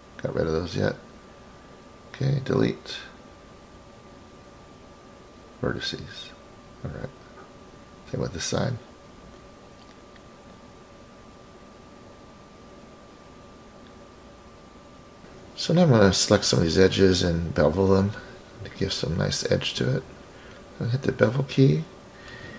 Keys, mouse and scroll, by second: 1.3 click, 3.5-3.9 scroll down 2, 5.3 Delete, 7.7-8.7 drag, 9.8 Delete, 11.9-12.6 scroll down 1, 12.6 click, 12.6-13.4 scroll down 2, 14.3 Delete, 15.0 typing, 16.2 middle click, 16.8 click, 18.0 shift+click, 19.2-20.7 drag, 22.2 click, 22.4 click.